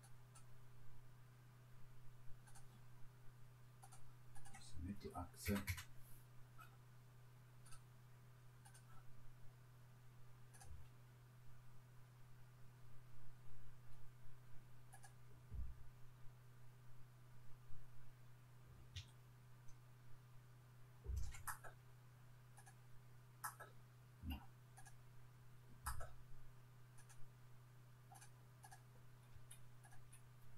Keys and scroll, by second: 5.5 Return, 29.3 Delete.